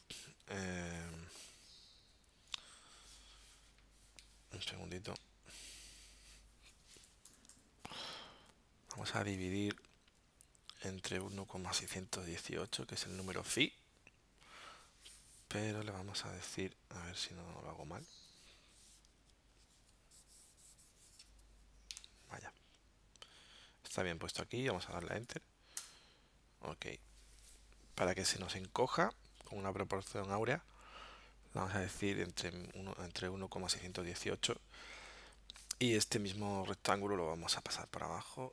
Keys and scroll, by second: 4.3 alt+super+-, 5.2 alt+super+0, 22.1 alt+super+-, 25.8 Return.